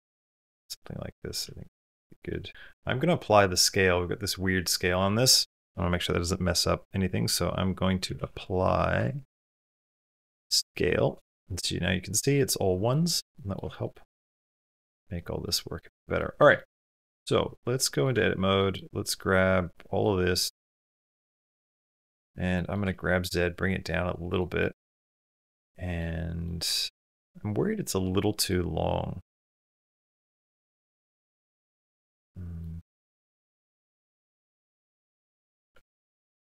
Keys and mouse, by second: 1.2 s, 2.2 click, 2.5 s, 6.3 F3, 8.1 p, 9.3 BackSpace, 12.7 middle click, 13.2 middle click, 13.5 shift+middle click, 13.8 middle drag, 14.2 middle drag, 14.6 middle click, 15.0 middle drag, 15.4 middle click, 15.8 shift+middle click, 16.0 middle click, 16.4 shift+middle click, 16.6 middle click, 17.6 middle click, 17.9 Tab, 18.4 middle click, 19.6 click, 21.0 click, 21.6 click, 21.9 middle click, 22.4 middle click, 22.6 g, 24.4-26.0 middle drag, 26.3 middle click, 27.3-28.4 middle drag, 30.1 shift+click, 30.9 shift+click, 31.3-32.4 middle drag, 33.1 g, 34.4 g, 35.5 Tab, 35.8 middle click.